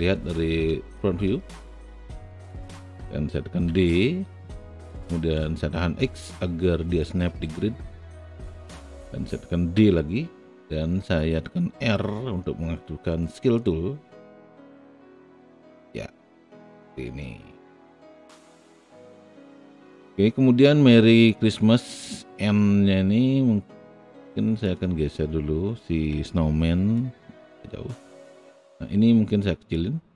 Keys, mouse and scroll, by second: 0.7 space, 1.8-3.5 drag, 3.7 d, 7.0-10.8 drag, 11.7 r, 13.4-15.7 drag, 16.1-17.3 alt+middle drag, 26.1 w, 28.6-29.7 drag.